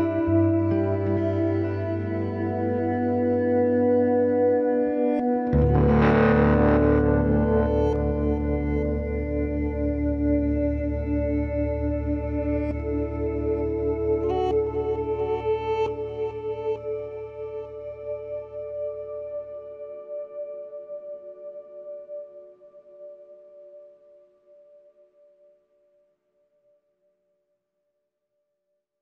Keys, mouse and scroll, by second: 1.2 k, 8.3 middle click, 8.6 c, 9.3-10.5 drag, 9.6 ctrl+Tab, 10.5 c, 16.1 click, 16.3 right click, 17.3 click, 17.4 right click, 17.9 middle click, 18.3 c, 18.9 middle click, 24.8 right click, 25.4-27.3 middle drag, 26.6 k.